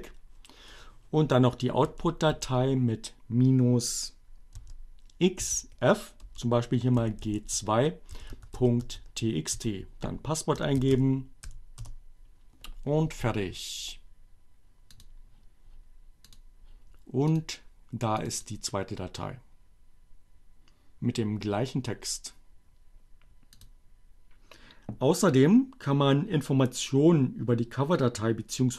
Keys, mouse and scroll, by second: 0.0-0.3 typing, 1.9 -, 2.8 x, 5.3 f, 5.5 space, 6.6-9.0 typing, 9.2 Return, 10.4-11.3 typing, 14.3 click, 16.0 click, 17.2 click, 18.0 click, 21.6 click.